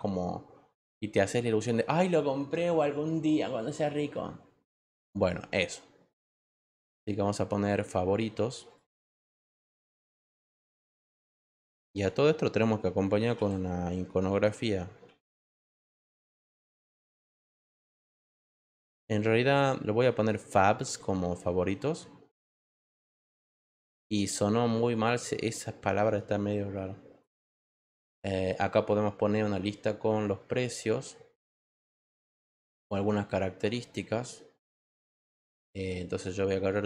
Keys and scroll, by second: 11.0 t, 13.4-16.3 typing, 20.8 s.